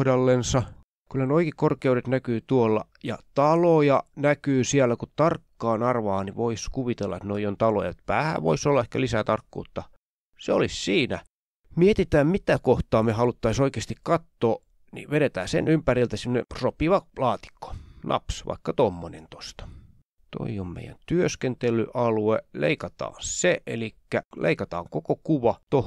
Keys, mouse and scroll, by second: 1.3-1.6 ctrl+scroll up 2, 2.5 click, 3.4 ctrl+click, 3.5-3.9 ctrl+scroll up 2, 3.9-4.4 ctrl+scroll down 2, 5.0 click, 5.5-6.0 ctrl+scroll down 3, 7.2 click, 7.4 click, 8.0-9.0 ctrl+scroll up 4, 9.6-10.4 scroll down 3, 11.1 click, 13.5-16.7 drag, 17.1 click, 18.6-19.3 ctrl+scroll up 2, 20.0-20.7 ctrl+scroll down 2, 20.7-21.1 scroll down 1, 21.4 click, 23.0 click, 25.4 click.